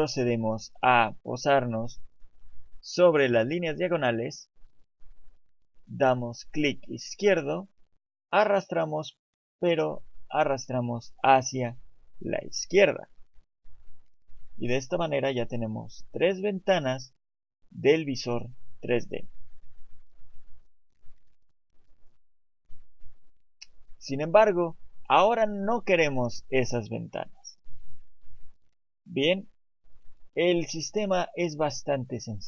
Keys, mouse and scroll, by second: 6.5 click.